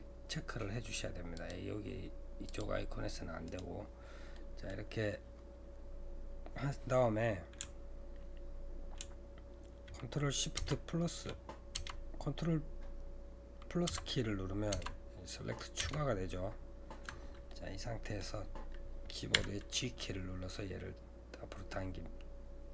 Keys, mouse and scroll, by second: 4.3-7.4 middle drag, 10.6 ctrl+shift+KP_Add, 11.7 ctrl+KP_Add, 13.9 ctrl+KP_Add, 17.5-19.4 middle drag, 19.4 g.